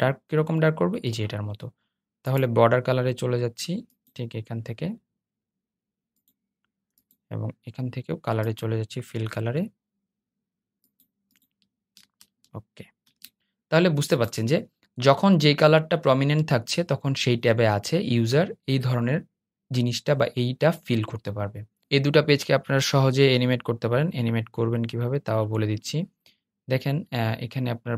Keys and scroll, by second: 12.2 super+0.